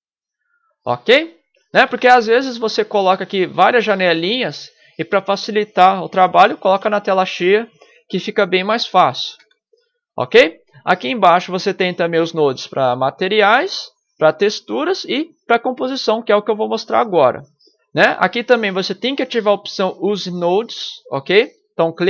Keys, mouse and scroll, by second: 1.8 ctrl+Up, 2.6 ctrl+Up, 3.2 ctrl+Up, 3.7 ctrl+Up, 4.3 ctrl+Up, 9.4 ctrl+Down, 10.5 ctrl+Down, 11.9 ctrl+Down, 12.9 ctrl+Down, 14.9 ctrl+Down, 15.5 ctrl+Down, 17.8 ctrl+Down, 18.3 ctrl+Down, 19.2 ctrl+Down, 20.0 ctrl+Down, 21.9 click.